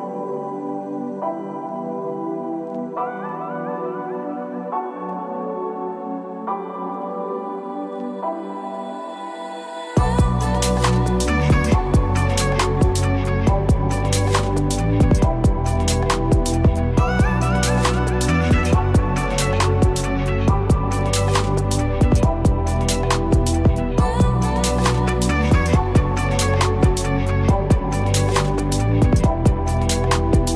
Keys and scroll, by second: 12.2 ctrl+-.